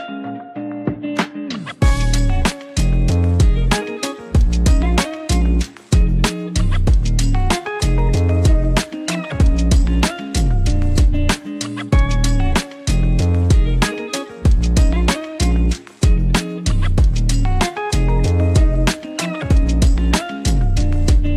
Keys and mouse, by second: 1.0 click, 2.3 s, 3.3 click, 3.9 g, 4.9 click, 5.4 click, 8.8 click, 13.0 click, 13.6 g, 15.2 click, 16.0 click, 17.0 shift+click, 19.1 click, 19.9 g.